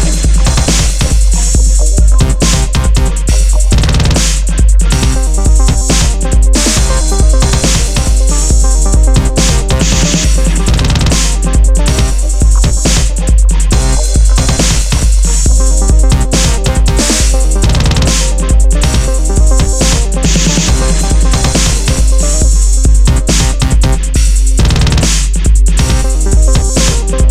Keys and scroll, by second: 2.0 super+u, 5.1 Return, 16.6 super+-, 17.0 super+-, 19.0 super+space, 25.7 super+BackSpace, 25.8 super+d.